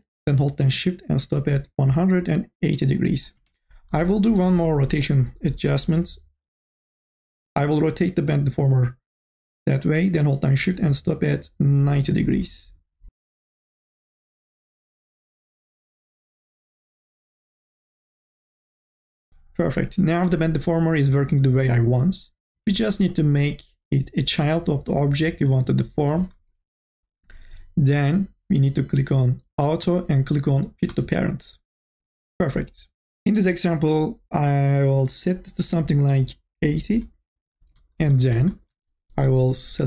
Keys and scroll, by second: 22.9 ctrl+z.